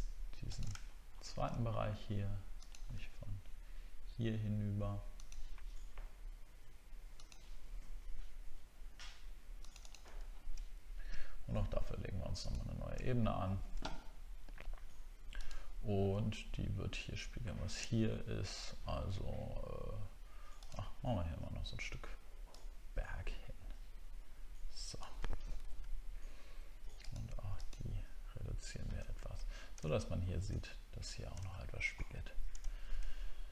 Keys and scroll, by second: 0.8 alt+scroll up 1, 10.3 alt+scroll down 1, 13.1-13.5 alt+scroll down 1, 25.6 ctrl+d.